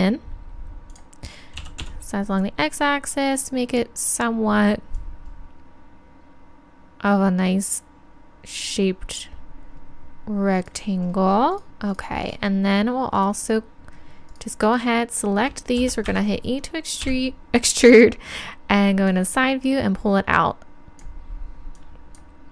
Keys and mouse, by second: 1.0-2.7 drag, 4.1-6.9 drag, 10.6-16.0 right drag, 17.0 KP_3, 19.1 click, 20.2 click, 21.8-22.5 drag.